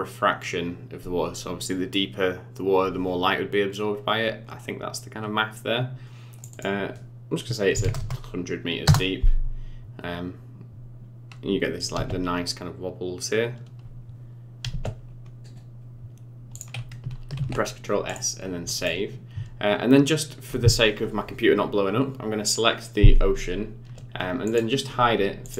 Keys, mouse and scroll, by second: 6.4 click, 7.9 KP_0, 12.1 space, 14.7 space, 16.5 click, 17.3 ctrl+s, 18.7 click, 24.4 click, 25.4 click.